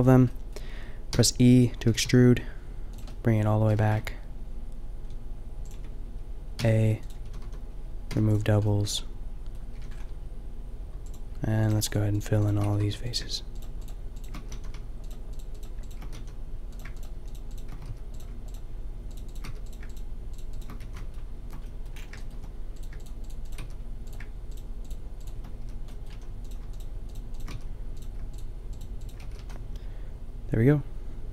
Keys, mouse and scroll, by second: 0.1 click, 1.1 e, 1.8-2.9 drag, 1.8 g, 3.6 g, 6.5 s, 7.2 a, 7.4 a, 8.0 w, 9.7 a, 10.5 click, 12.6 f, 12.8 a, 14.4 f, 14.6 a, 16.0 f, 16.2 a, 17.9 f, 19.5 f, 20.6 f, 20.7 a, 22.0 click, 22.1 click, 23.6 f, 25.6 f, 26.1 a, 27.5 f, 29.2 f, 29.3 a.